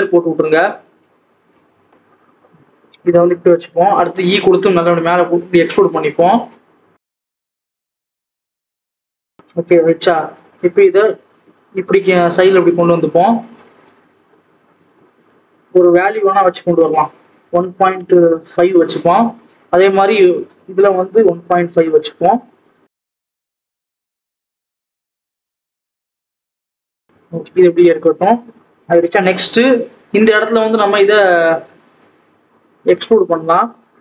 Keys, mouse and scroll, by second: 0.0-1.9 drag, 4.0 e, 6.4 click, 7.3 KP_3, 7.5 KP_1, 8.1-8.6 scroll up 1, 8.6 click, 8.8-10.5 scroll down 2, 10.5 click, 17.9 click, 19.1-21.4 scroll up 1, 21.4-23.1 drag, 23.4 alt+z, 23.9 click, 25.3 click, 25.8 scroll up 1, 25.9 ctrl+z, 26.9 scroll down 1, 27.6 scroll down 1, 27.7 alt+a, 28.0-31.4 scroll up 2, 31.9 click, 32.4-34.0 scroll up 1.